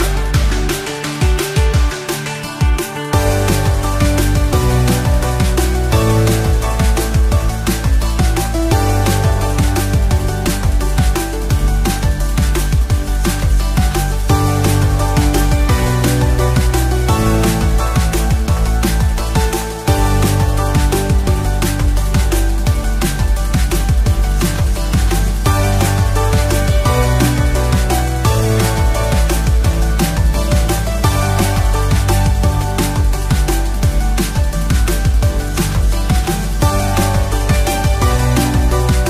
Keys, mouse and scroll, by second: 1.4 shift+d, 2.7 x, 4.0 click, 5.3-9.8 drag, 7.3-9.1 typing, 10.5 shift+click, 11.0 shift+click, 11.7 shift+click, 12.2 shift+click, 12.6 shift+click, 13.3 shift+click, 14.4 ctrl+j, 17.2 shift+click, 18.6 ctrl+j, 24.6 Tab, 25.3-25.8 scroll up 2, 25.8-27.0 shift+middle drag, 27.4 2, 28.3 click, 29.0 shift+click, 29.6 f, 30.2 click, 30.9 shift+click, 31.8 f, 32.5 click, 33.3 shift+click, 34.3 f, 35.1 click, 35.7 shift+click, 37.1 click, 37.1 f, 37.7 shift+click, 38.6 f.